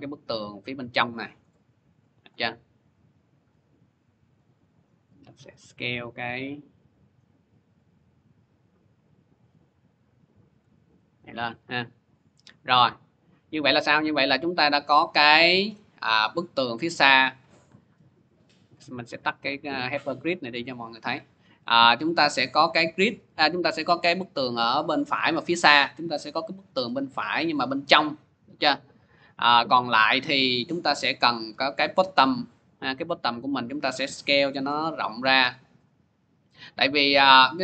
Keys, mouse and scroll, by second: 1.0-9.0 shift+drag, 7.3 s, 10.3 click, 11.0 scroll, 12.2 scroll, 14.4 click, 18.5 click, 21.2 click, 26.4 click, 28.8 middle click, 31.7 click, 32.6-33.8 scroll, 34.0 s, 35.5 click, 37.2 click.